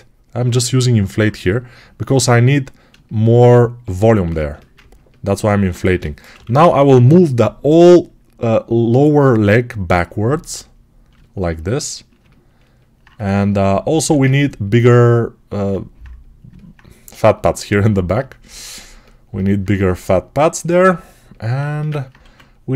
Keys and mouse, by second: 5.7 g, 6.2 ], 6.4 ], 11.0-12.7 alt+shift+drag, 12.7-13.8 alt+shift+drag, 13.8 alt+q, 21.5-22.7 ctrl+alt+shift+right drag, 22.1 1.